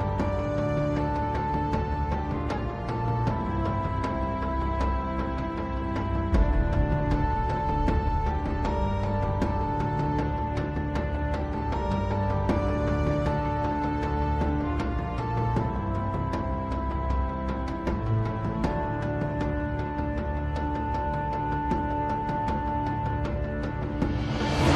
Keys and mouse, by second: 7.3 click, 8.1 F2, 10.0 t, 14.3 middle click, 15.1 middle click, 16.8 Tab, 19.2 1, 23.2 KP_3, 24.3 middle click.